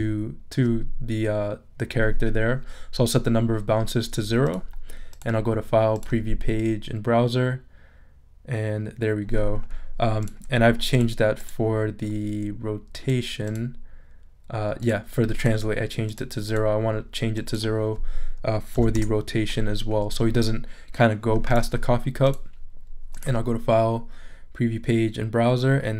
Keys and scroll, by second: 18.7 0, 18.9 Return.